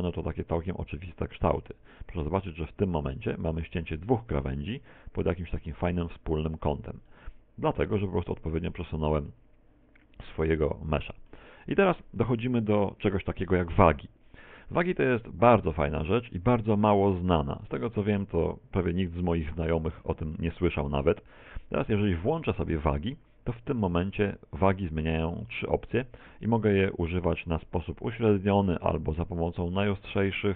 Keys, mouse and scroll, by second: 2.2 right click, 3.1 shift+right click, 4.7 click, 6.0 middle click, 7.6 middle click, 8.6 shift+middle click, 8.8 shift+middle click, 9.2 a, 9.4 a, 9.8 middle click, 10.4 middle click, 12.7 shift+middle click, 24.1 click.